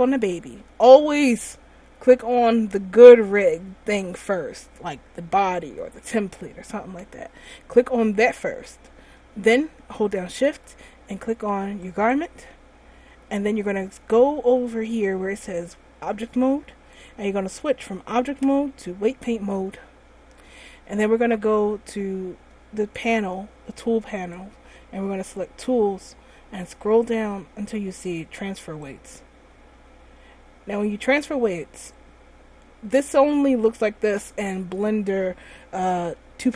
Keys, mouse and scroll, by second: 0.3 right click, 12.2 shift+right click, 17.1 click, 19.8 click, 24.3 click, 25.6 click, 26.5-28.7 scroll down 9, 29.0 click.